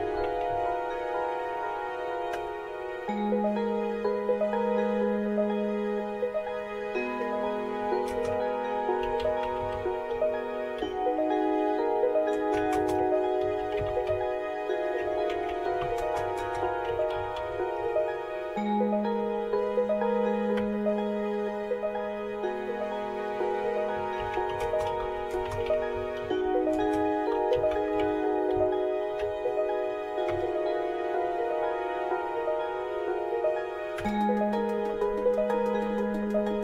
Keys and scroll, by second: 0.0-1.1 typing, 2.3 Return, 7.8-10.8 typing, 12.3-18.3 typing, 20.6 Return, 23.7-30.8 typing, 34.0 Return.